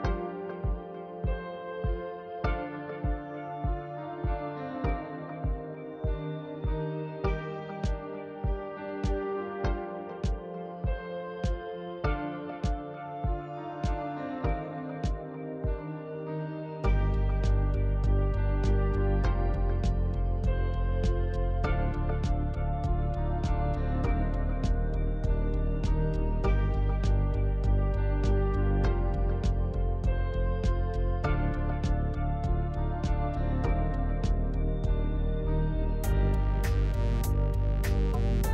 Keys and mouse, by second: 0.7 middle click, 2.2 KP_3, 3.6 alt+z, 4.6 ctrl+click, 5.5-7.1 ctrl+drag, 7.4 ctrl+click, 10.2 ctrl+click, 11.5 ctrl+click, 12.7 alt+z, 12.9 middle click, 14.4 KP_3, 16.2 g, 21.4 alt+click, 23.3 ctrl+click, 25.2 alt+z, 26.7 ctrl+click, 27.8 ctrl+click, 29.1 KP_Decimal, 30.3 ctrl+click, 31.7-34.8 ctrl+drag.